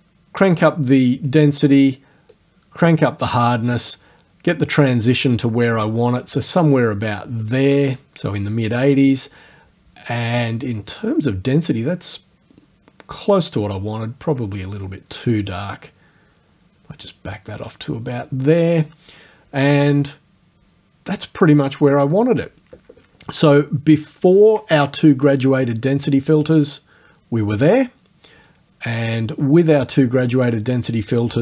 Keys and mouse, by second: 1.5 middle click, 2.3-7.6 drag, 7.6-9.5 middle drag, 12.2 click, 18.6 middle click, 20.0 click, 26.4 click, 31.1 click.